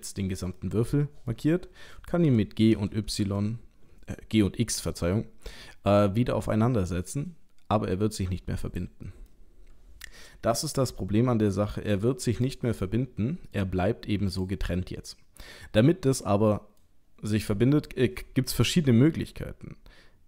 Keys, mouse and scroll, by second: 0.6 middle click, 2.3 g, 9.2 middle click, 11.9 g, 12.8 middle click, 13.6 g, 14.7 middle click.